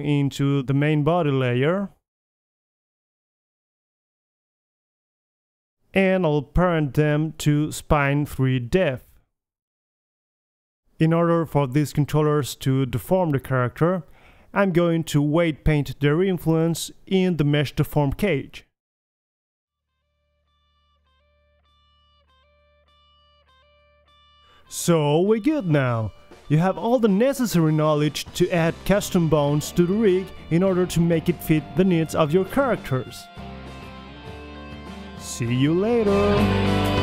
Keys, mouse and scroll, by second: 1.7 Tab, 2.0-3.2 drag, 2.6 m, 6.0 middle click, 7.3-8.5 drag, 8.5 middle click, 8.7 Tab, 8.8 click, 9.3-10.5 drag, 9.9 Tab, 10.5 Tab, 10.9 ctrl+p, 11.5-12.1 middle drag, 11.8 Tab, 12.5-13.6 drag, 13.0 r, 13.6 middle drag, 14.7-15.2 middle drag, 15.2 KP_3, 15.6 middle click, 15.9-16.3 middle drag, 16.3 click, 16.6 Tab, 16.7 g, 17.4 Tab, 19.3 click, 19.8 click, 19.9 middle click, 20.6 click, 20.7 middle click, 20.8 click, 21.1 click, 22.1 click, 22.3 middle click, 22.6 click, 22.9 middle click, 23.8 g, 24.0 click, 24.1 middle click, 24.3 g, 25.1-25.7 drag, 25.3 g, 25.7 middle drag, 25.9 g, 27.1-27.7 drag, 27.3 right click, 27.6-30.1 typing, 27.7 middle click, 28.3-28.7 drag, 28.6 right click, 29.3 drag, 29.8 alt+g, 29.9 alt+r, 30.0 alt+s, 31.0 middle click, 31.1 click, 31.3 KP_1, 31.9 a, 33.7-35.0 middle drag, 35.0 click, 35.8-36.6 right drag, 35.9 g, 36.8 click.